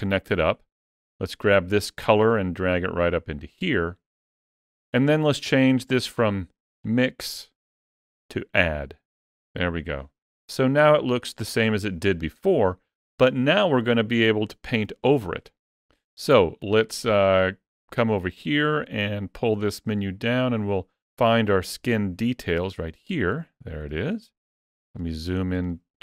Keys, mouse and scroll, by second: 1.3 click, 6.6 click, 16.4 click, 18.0 click, 23.5-23.9 scroll up 2, 23.9 shift+middle click, 24.4 scroll up 2, 24.7 shift+middle click, 25.2-25.5 scroll up 2, 25.5 shift+middle click.